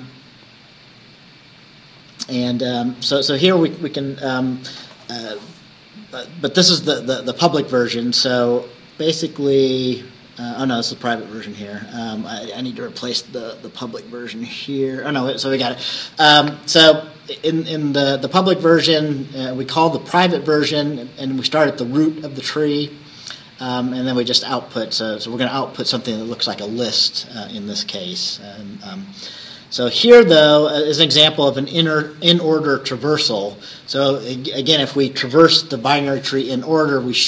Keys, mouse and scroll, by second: 0.2 scroll down 2, 2.3 scroll up 2, 3.0 scroll down 2, 9.0 scroll up 2, 10.8-11.1 scroll down 2, 11.4 scroll down 2, 12.1-12.4 scroll down 2, 22.3-29.1 drag, 29.1-29.5 scroll up 1, 29.7 scroll up 1, 30.5 scroll up 1.